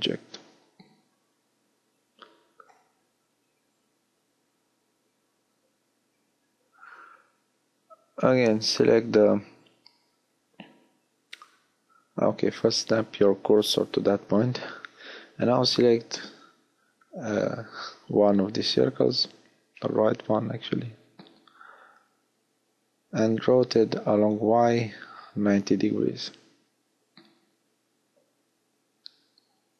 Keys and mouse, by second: 1.1 shift+f, 3.1 f, 7.3-8.5 middle drag, 8.5 shift+s, 13.7 middle click, 13.7 b, 16.1 shift+d, 17.5-19.3 drag, 18.3 r, 28.2-29.4 middle drag.